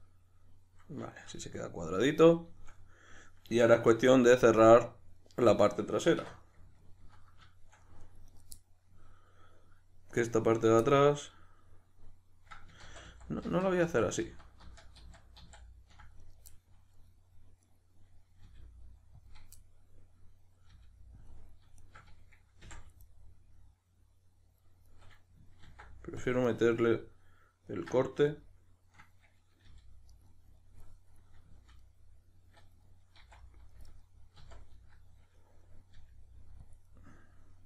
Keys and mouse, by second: 3.9 q, 6.2 1, 8.3 right click, 8.6-10.5 middle drag, 10.5 right click, 10.9-16.2 middle drag, 12.9 ctrl+z, 16.2 right click, 16.5-17.7 middle drag, 17.7 right click, 18.5 g, 19.3 click, 19.6-20.7 middle drag, 20.7 g, 21.3 click, 21.8 shift+right click, 22.7 f, 23.1-25.7 middle drag, 25.7 ctrl+r, 26.6 right click, 27.7 middle click, 29.6 g, 30.2 right click, 30.6 middle click, 31.4 z, 31.8 middle click, 33.2 c, 33.9 right click, 34.4 z, 34.7-36.7 middle drag, 35.9 g, 36.7 click, 36.8-37.6 middle drag.